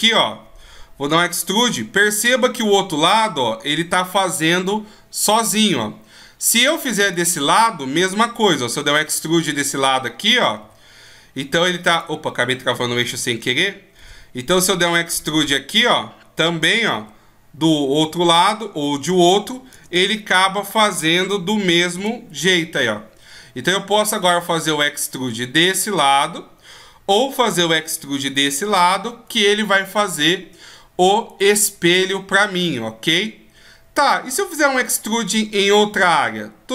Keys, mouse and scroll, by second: 6.6 right click, 8.6 e, 12.6 ctrl+z, 13.6 e, 30.9 right click, 34.5 right click, 36.5 e.